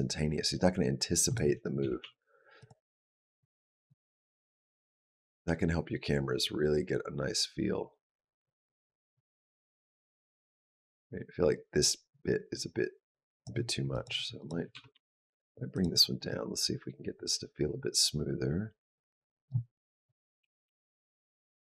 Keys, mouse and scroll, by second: 1.6 g, 3.2 click, 4.0 click, 13.7 click, 14.2 click, 14.5 g, 16.1 click, 19.8 click, 20.2 g.